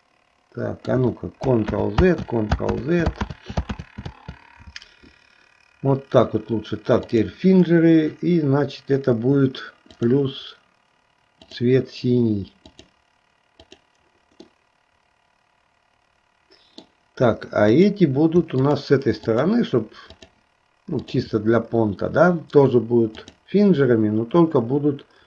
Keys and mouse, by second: 2.0 ctrl+z, 2.4 ctrl+z, 3.0 ctrl+z, 3.5 ctrl+z, 3.9 ctrl+z, 7.1 click, 11.4-13.1 drag, 13.8 click, 14.6-17.1 middle drag, 17.7 click, 18.7 shift+click, 19.5 shift+click, 20.4 shift+click, 21.2 shift+click, 23.2 click.